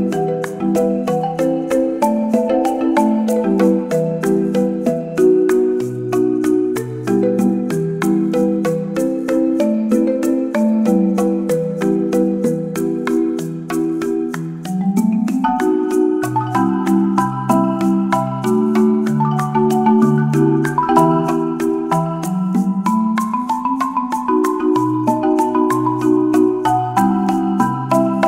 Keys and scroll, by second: 0.5 space, 3.5 space, 10.0 space, 14.8 space, 18.5 space.